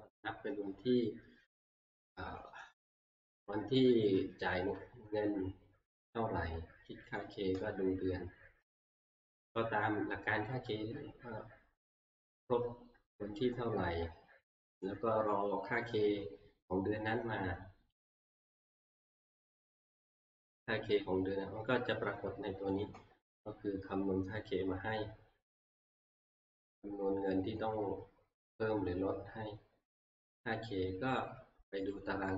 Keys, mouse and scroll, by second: 7.2 click, 18.1 click, 22.8 click, 31.9 click.